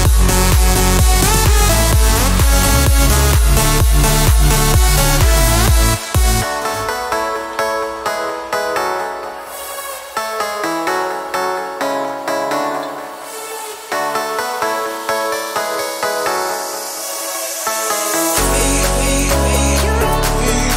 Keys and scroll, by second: 5.0 Escape, 13.8 Escape, 15.7 Escape.